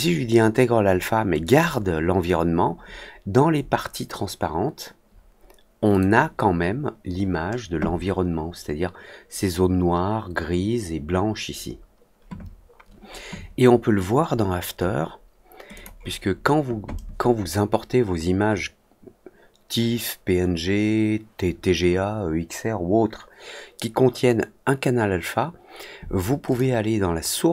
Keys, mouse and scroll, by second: 1.4 click, 5.8 click, 15.7 click, 26.4 click.